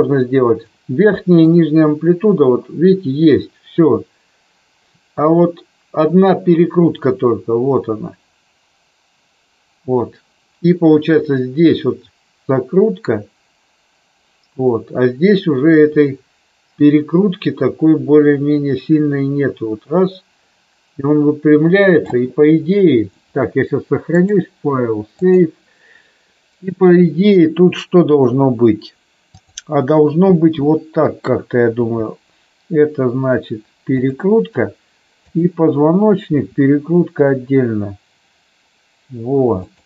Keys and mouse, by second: 1.4-22.2 drag, 24.1-25.3 drag, 29.3 click, 31.8 r, 34.0 click, 35.2 click, 36.2 r, 39.6 click.